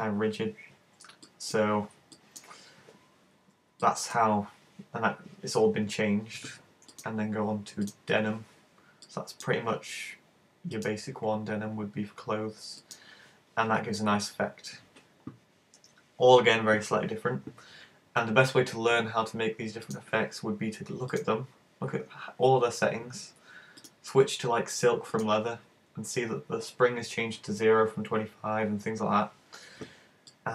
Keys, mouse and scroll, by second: 1.3 middle click, 2.2 middle click, 3.9 middle click, 7.0 click, 9.1 click, 10.8 click, 12.9 click, 19.9 click, 23.8 click, 30.3 click.